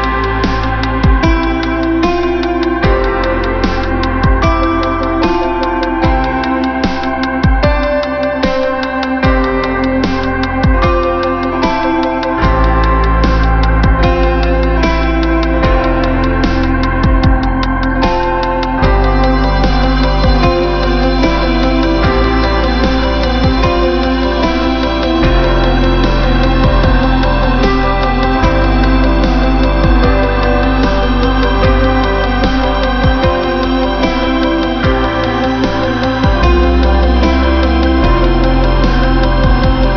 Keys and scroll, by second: 2.0 ctrl+-, 5.5 ctrl+=, 6.5 space, 11.3 ctrl+-, 33.0 space, 34.7 ctrl+=, 35.7 space, 37.3 space.